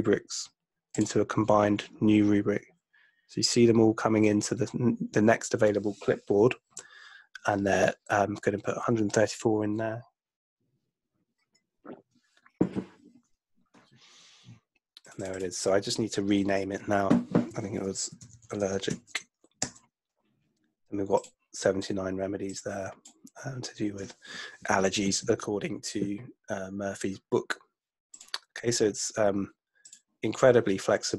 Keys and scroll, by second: 17.9-19.4 typing, 19.6 Return.